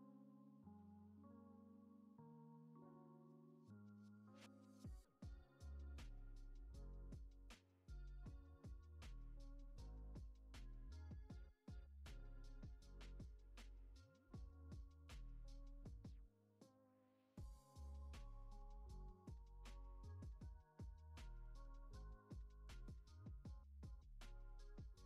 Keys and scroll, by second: 3.6 ctrl+c, 6.8 n, 7.2 ctrl+s, 8.8 ctrl+c, 10.0 ctrl+c, 12.2 ctrl+c, 12.4 ctrl+v, 13.2 ctrl+c, 14.5 ctrl+c, 15.7 ctrl+c, 16.8 ctrl+c, 19.6 ctrl+c, 20.9 ctrl+c, 22.0 ctrl+c, 22.9 ctrl+s, 24.9 ctrl+c.